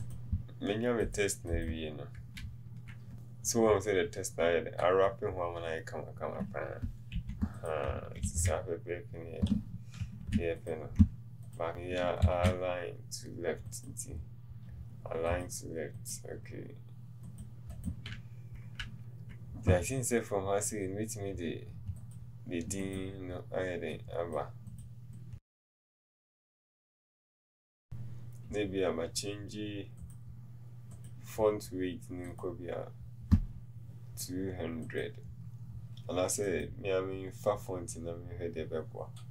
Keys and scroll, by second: 7.3 t.